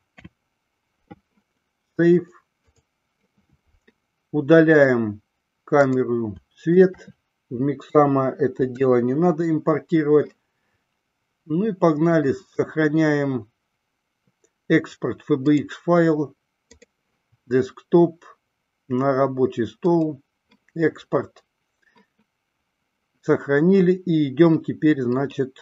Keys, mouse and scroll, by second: 4.9 click, 5.8 click, 6.9 shift+click, 8.7 Delete, 12.2-16.1 drag.